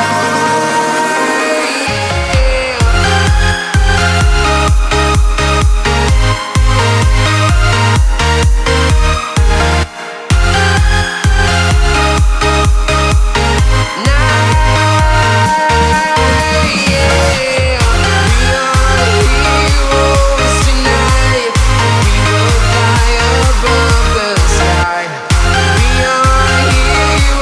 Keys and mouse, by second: 0.1 g, 0.4 z, 1.0 click, 1.5 ctrl+click, 1.7 ctrl+a, 5.8 click, 7.6 click, 8.2-10.2 drag, 11.8-20.4 drag, 13.8 KP_0, 16.8 KP_7, 22.0-23.1 drag.